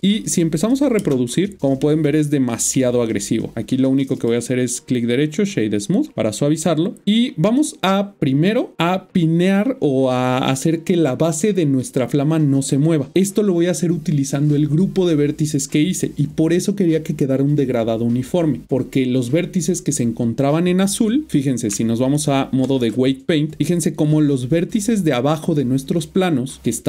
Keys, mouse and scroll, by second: 1.0 space, 1.8 middle click, 5.3 click, 21.3 typing, 21.7-24.3 Tab.